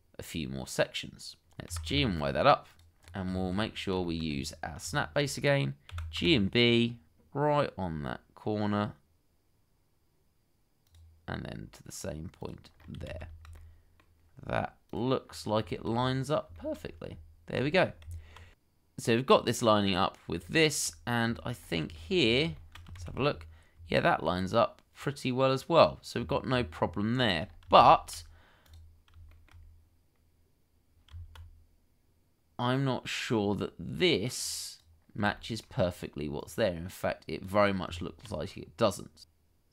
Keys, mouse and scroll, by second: 1.9 y, 3.0-3.3 scroll up 1, 3.4 shift+middle click, 3.6-4.0 scroll up 1, 4.0 shift+middle click, 4.2-4.8 scroll up 1, 5.0 shift+middle click, 5.9 g, 6.2 b, 13.1 shift+z, 13.6 middle click, 15.2 scroll down 1, 15.7 shift+middle click, 15.9-16.5 scroll up 1, 16.5 shift+middle click, 16.8-17.5 shift+scroll up 1, 17.5 scroll up 1, 17.8 scroll down 1, 18.0 Tab, 18.5-18.8 scroll down 1, 18.9 shift+z, 19.1-19.9 scroll down 1, 20.7 shift+middle click, 21.1 shift+middle click, 21.3 shift+scroll down 1, 21.5-21.9 scroll up 1, 21.9 shift+middle click, 22.1-22.5 scroll up 1, 22.5 shift+middle click, 23.0 shift+z, 23.3-23.7 scroll up 1, 23.9 shift+middle click, 24.2-24.9 scroll up 1, 26.1-26.4 scroll down 1, 27.2 shift+middle click, 27.5-27.8 shift+scroll up 2, 27.8 shift+z, 29.3 shift+middle click, 31.1 Tab, 33.3-33.9 scroll up 1, 35.1 scroll down 1, 35.3 shift+middle click, 37.9 Tab, 38.5-39.0 scroll down 1.